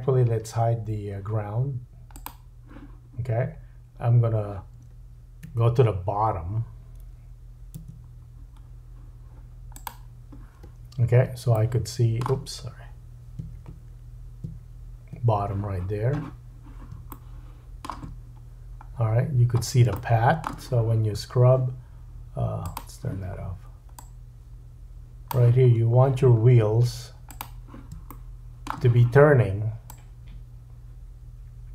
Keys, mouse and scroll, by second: 2.2-5.5 middle drag, 5.5 1, 11.5 middle click, 14.6 ctrl+middle click, 17.1 shift+middle click, 18.5-19.0 scroll up 1, 19.0-19.8 scroll down 3, 19.9 shift+middle click, 22.6-27.4 drag, 25.7-26.9 scroll up 2, 27.4-29.9 middle drag, 29.9-31.7 drag.